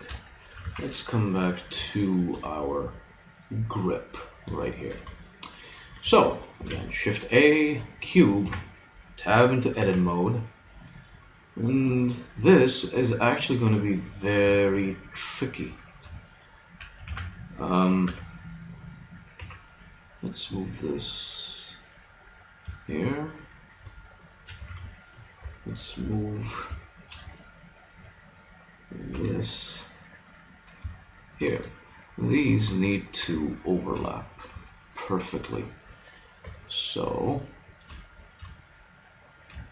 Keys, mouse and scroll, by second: 0.6 z, 6.0 middle click, 6.6 shift+a, 8.4 Tab, 9.8 g, 15.8-18.0 middle drag, 17.1 a, 18.0 b, 19.4 g, 23.1-24.2 drag, 24.6 a, 25.4 b, 26.1 click, 26.8-29.2 middle drag, 29.2 g, 33.5-36.4 middle drag, 36.5 b, 37.4 click, 38.2 click, 38.8 click, 39.3 click.